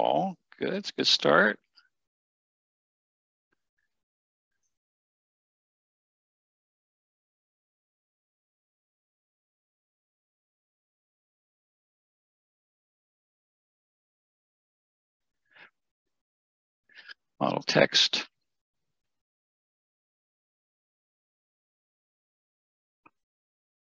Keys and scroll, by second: 6.4 1, 8.5 Return, 21.5 typing, 22.6 typing.